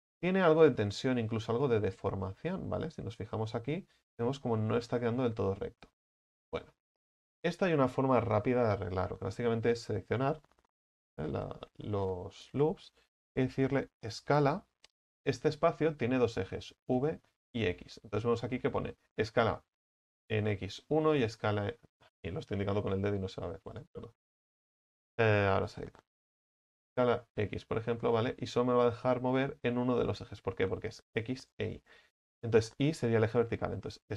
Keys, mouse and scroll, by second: 0.6-14.3 right drag, 14.3 s, 26.7 s.